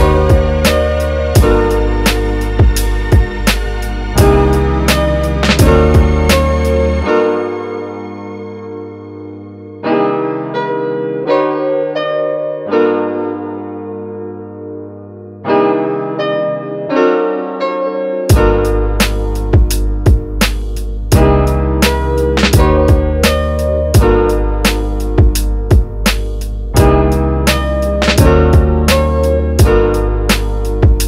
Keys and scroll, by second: 6.0 space, 7.5 s, 15.4 space, 27.7 super+s, 28.5-30.0 typing, 30.7 Return.